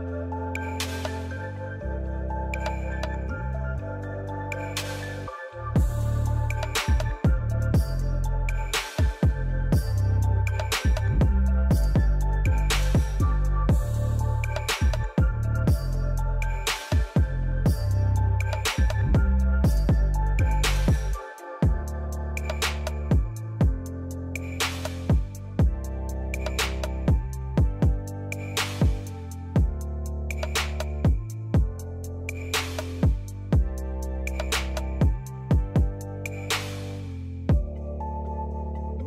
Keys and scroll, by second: 0.0 ctrl+v, 8.2 ctrl+c, 8.4 ctrl+v, 17.1-18.5 typing, 28.5 j, 34.6 j, 35.4 j.